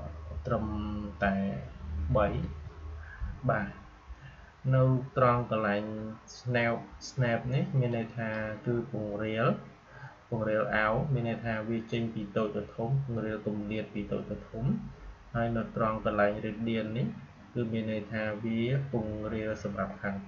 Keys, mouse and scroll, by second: 7.8-10.7 drag.